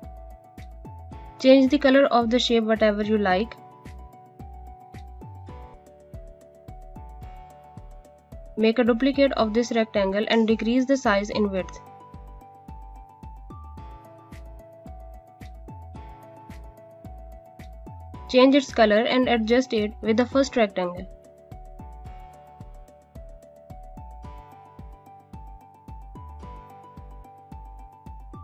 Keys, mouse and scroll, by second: 4.2 click, 7.5 space, 10.5 alt+click, 13.9 click, 16.6 scroll up 1, 17.6 click, 24.6 scroll down 1, 25.4 space, 25.6 click, 26.0 space, 27.1 click.